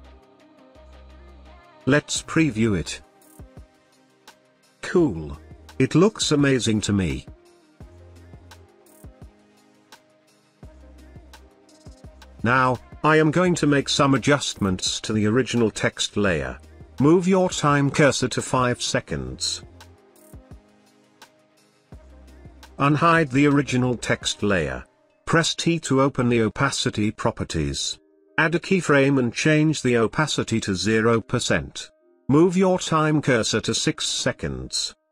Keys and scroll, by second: 25.3 t.